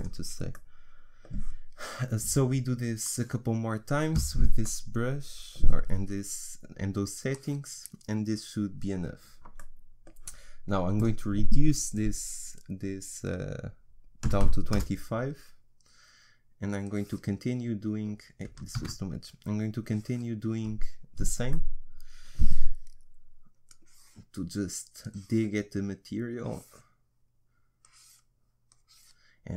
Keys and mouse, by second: 0.5 middle click, 3.1-4.9 drag, 4.9 middle click, 7.3-9.2 drag, 9.2 middle click, 11.0-16.8 middle drag, 16.8-18.8 drag, 18.8 ctrl+z, 19.8-21.5 drag, 21.5-23.7 middle drag, 23.7-29.5 drag.